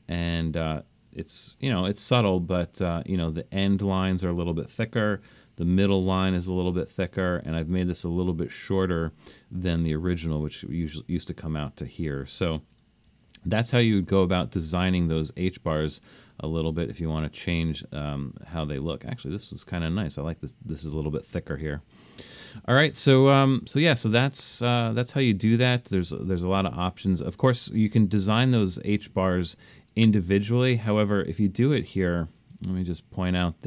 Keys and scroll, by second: 1.5 super+=, 1.9 super+=, 5.2 super+=, 13.3 super+-, 13.8 super+-, 15.2 super+-.